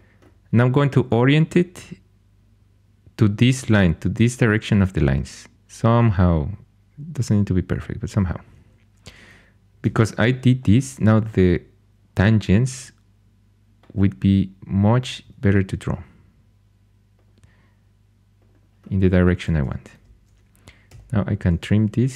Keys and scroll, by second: 9.9 shift+a, 15.2 shift+a, 19.5 2, 20.8 t.